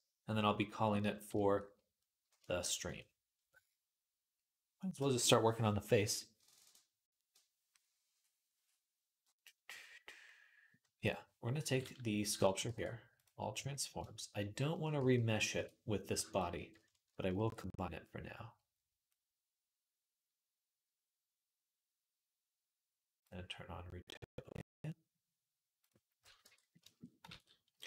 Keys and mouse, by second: 12.4 ctrl+a, 14.8 g, 16.1 shift+click, 17.8 ctrl+j, 17.8-24.7 middle drag, 24.7-26.2 drag, 26.2 Tab, 26.2-27.8 middle drag, 27.6 ctrl+s.